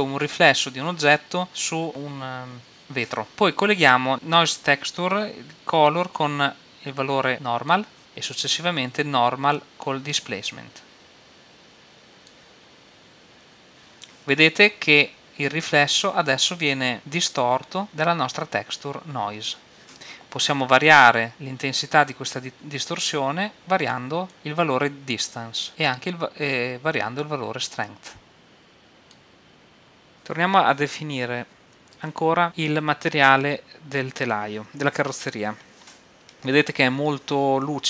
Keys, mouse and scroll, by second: 5.9-7.3 drag, 9.5-11.7 drag, 23.8-25.9 drag, 27.8-30.1 drag, 34.3-36.0 right drag.